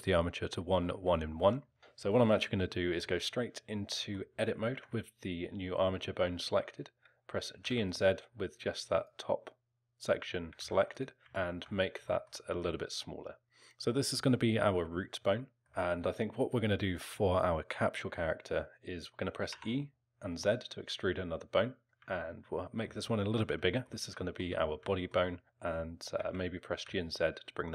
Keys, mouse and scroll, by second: 3.9 middle click, 3.9 scroll up 1, 4.7 Tab, 7.5 g, 10.5 g, 11.4 alt+middle click, 11.7 scroll down 2, 12.1 alt+middle click, 15.6 alt+middle click, 19.5 e, 22.2 alt+middle click, 23.7 alt+middle click, 24.2 alt+middle click, 24.9 alt+middle click, 26.2 g.